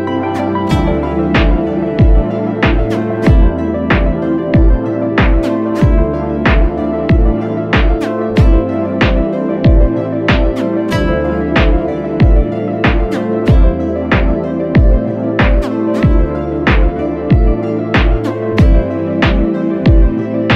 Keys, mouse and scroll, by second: 1.5 alt+click, 3.2 alt+click, 5.3 alt+click, 6.8 alt+click, 16.6 alt+click.